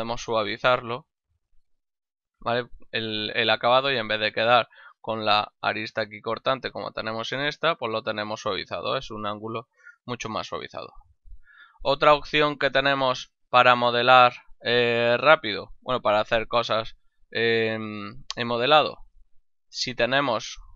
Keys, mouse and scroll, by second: 1.8 middle click, 3.7 shift+middle click, 4.4 ctrl+middle click, 5.0 shift+middle click, 7.5 middle click, 8.9 middle click, 9.5 middle click, 10.3 middle click, 10.7 middle click, 11.3 Tab, 11.9 shift+middle click, 12.3 middle click, 12.7 middle click, 13.5 middle click, 13.8 middle click, 15.3 middle click, 17.3 middle click, 19.1 ctrl+Tab, 19.5 click, 19.9 right click.